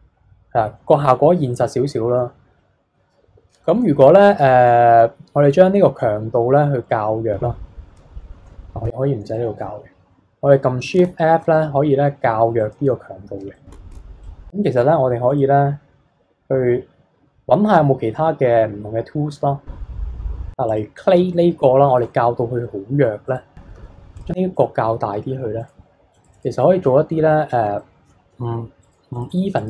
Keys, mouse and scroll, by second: 3.2 n, 6.5-7.6 scroll down 4, 7.6-8.1 scroll up 1, 8.8 n, 9.3-10.9 middle drag, 10.9 shift+f, 13.0-13.5 scroll up 2, 13.5 shift+middle click, 13.9 shift+f, 14.6-18.2 drag, 20.6 click, 21.3 middle click, 21.9 shift+f, 23.7 f, 24.3 scroll down 3, 24.5-25.5 middle drag, 25.5-27.2 drag, 27.2-27.7 scroll up 3, 27.7 shift+middle click, 28.3 f, 29.1-29.6 drag.